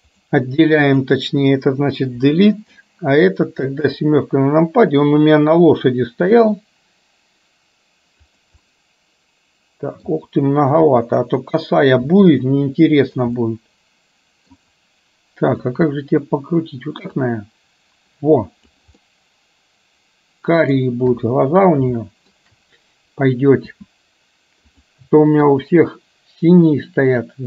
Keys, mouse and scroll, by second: 0.9 click, 2.2 Delete, 3.2 click, 3.8 KP_7, 6.3 r, 8.8-10.1 middle drag, 10.9 KP_7, 12.2 r, 13.4-14.6 middle drag, 15.6 click, 17.2-18.8 drag, 19.1-20.7 middle drag, 21.2 KP_1, 22.1 shift+middle click, 23.7 s, 25.4 KP_3, 27.3-27.4 drag.